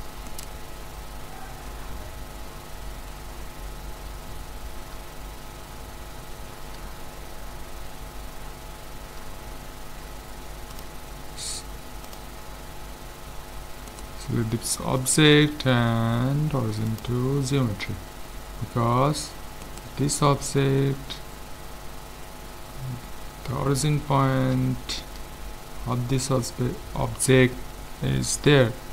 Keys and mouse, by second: 0.3-2.1 right drag, 2.1 middle click, 10.7-12.6 drag, 13.9-15.7 right drag, 15.0-16.7 drag, 17.7-19.6 middle drag, 19.6-21.2 right drag, 21.2-22.7 middle drag, 23.9-28.6 middle drag.